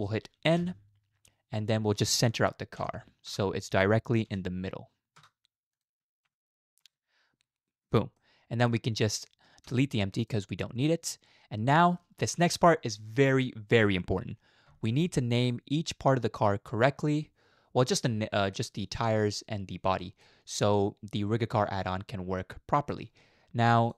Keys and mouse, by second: 0.6 n, 2.2-3.3 drag, 3.9-5.2 drag, 5.8-6.9 drag, 7.8 n, 8.2 middle click, 9.7 x, 11.0-11.9 middle drag, 15.4-17.9 middle drag, 18.5 middle drag, 20.2-22.9 middle drag.